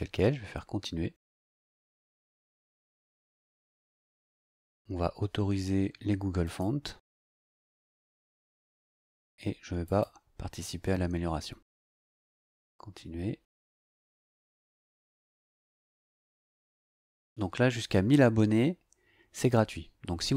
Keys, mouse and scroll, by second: 2.0 click, 6.4 click, 7.3 click, 9.8 click, 12.2 click.